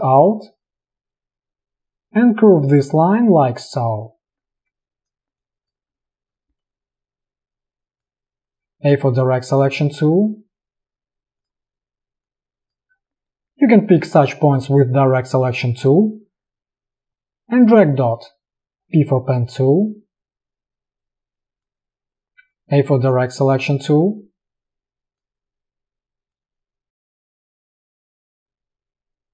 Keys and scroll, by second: 4.6 alt+space, 8.7 a, 13.0 v, 18.7 space, 18.8 p, 22.5 a, 27.4 space.